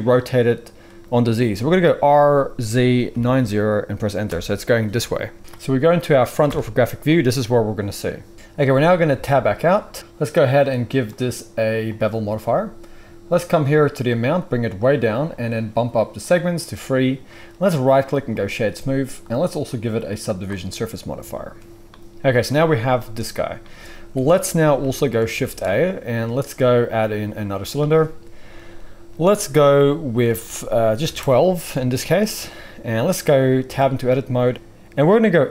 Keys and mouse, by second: 1.8 r, 6.4 KP_1, 8.3-10.5 middle drag, 9.1 Tab, 10.5-17.8 drag, 17.8-24.8 middle drag, 23.5-24.8 drag, 23.5-24.8 right drag, 24.1 KP_1, 25.4 shift+click, 25.4 shift+middle click, 25.4 shift+right click, 25.4 shift+a, 29.2 middle click, 33.6 Tab, 34.0-34.3 shift+drag, 34.3 middle click, 34.4 z, 34.5-35.5 drag.